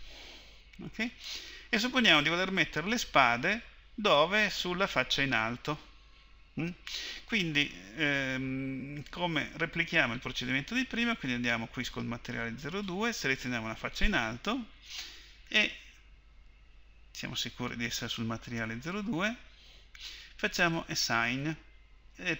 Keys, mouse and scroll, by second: 10.0-13.9 drag, 14.0-20.9 drag, 21.0-22.3 drag.